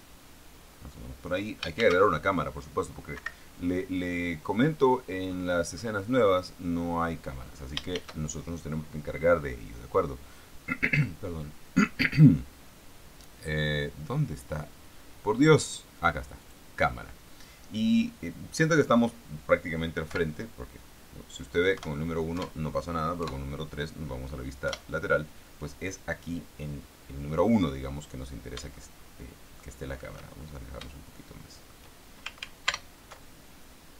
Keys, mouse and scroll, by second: 2.1 shift+a, 3.5 Escape, 4.0-5.2 scroll down 3, 5.7-6.5 scroll up 2, 6.7-7.2 scroll up 2, 7.5 scroll down 1, 8.3 shift+a, 16.7 click, 20.4 KP_1, 22.1 KP_1, 23.5 KP_3, 25.0 KP_1, 26.8 scroll up 2, 29.1-30.9 shift+middle drag, 30.9 shift+scroll down 3, 31.1-32.2 shift+middle drag, 32.7 ctrl+alt+middle click, 33.0 ctrl+alt+KP_0.